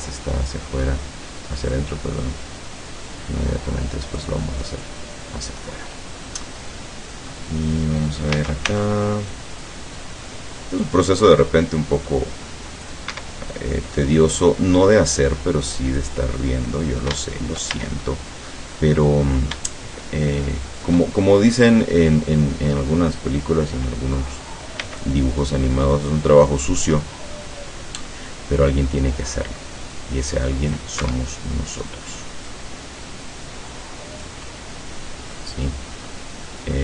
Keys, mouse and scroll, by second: 0.1 middle click, 1.8-4.4 drag, 4.6-5.8 middle drag, 6.6 middle click, 8.4 a, 8.7 c, 9.4-13.1 drag, 13.2 Escape, 13.4 middle click, 14.9-16.2 drag, 16.2-17.8 middle drag, 17.7 shift+a, 18.1 shift+middle click, 18.4 click, 19.6 shift+click, 20.4 shift+click, 24.9 c, 25.1-31.0 drag, 31.1 Escape, 31.4 middle click, 32.5-34.5 drag, 34.6-35.6 middle drag, 35.8 scroll down 2, 36.2-36.8 middle drag.